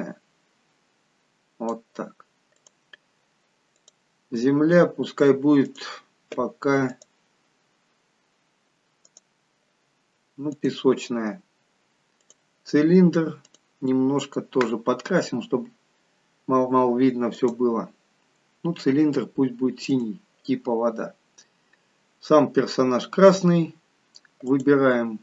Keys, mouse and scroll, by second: 21.1-22.5 scroll up 2, 23.7-24.4 scroll up 7, 24.5 click.